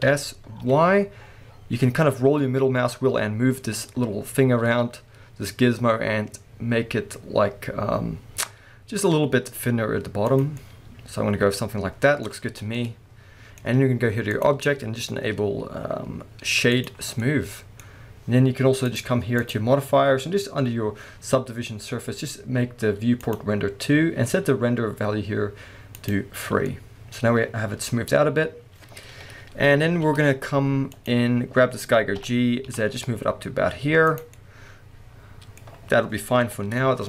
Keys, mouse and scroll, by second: 0.0 s, 10.4 click, 10.5-14.3 middle drag, 12.4 Tab, 14.3-17.2 drag, 17.1 scroll down 2, 17.2-17.6 middle drag, 18.9 click, 19.4 click, 23.2 click, 26.0 click, 26.7-37.0 middle drag, 29.1 KP_1, 29.8 alt+a, 30.2-30.9 scroll up 2, 30.9 click, 31.4-32.2 scroll down 2, 32.2 g, 34.2 click, 34.3 scroll down 2, 36.5 KP_1.